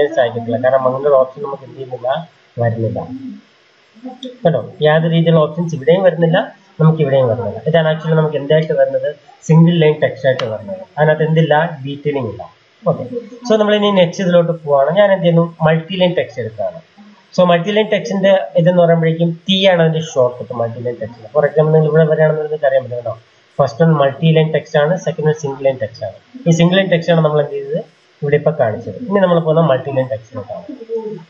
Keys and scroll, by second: 13.7 Escape.